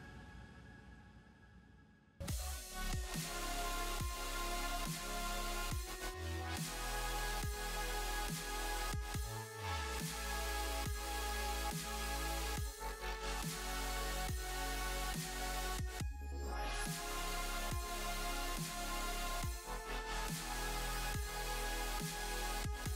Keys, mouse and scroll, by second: 17.6 middle click, 20.9 space, 21.5 middle click.